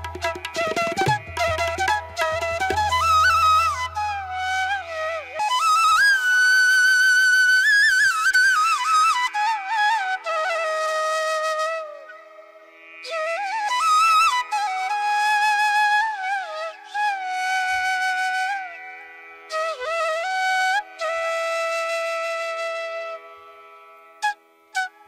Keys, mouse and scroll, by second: 0.6 ctrl+-, 1.2 space, 5.7 ctrl+-, 10.8 ctrl+=, 15.6 ctrl+alt+z.